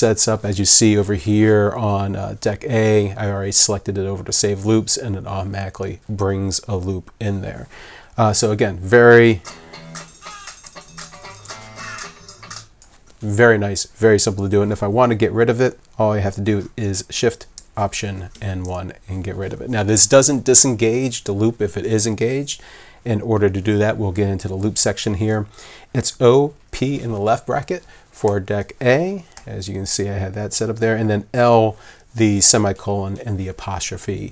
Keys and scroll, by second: 10.9 alt+1, 18.3 alt+shift+1, 28.3 [, 29.4 [.